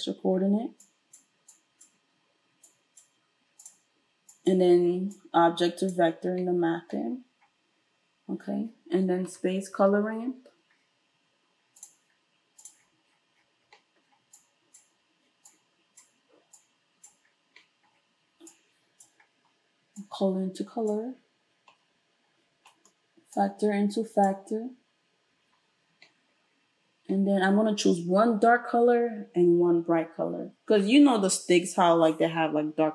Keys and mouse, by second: 0.8-3.7 drag, 3.7-4.3 middle drag, 4.3-12.7 drag, 9.3 space, 12.7-14.4 middle drag, 14.4-32.9 drag.